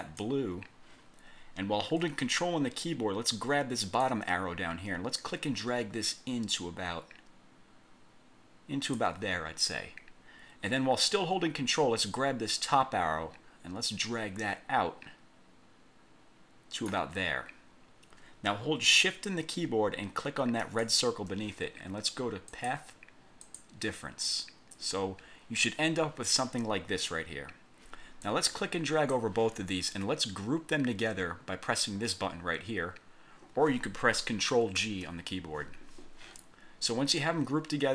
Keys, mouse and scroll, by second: 0.2 click, 4.1-9.2 ctrl+drag, 12.6-17.2 ctrl+drag, 20.8 shift+click, 22.7 click, 23.6 click, 28.4 click, 34.9 ctrl+g.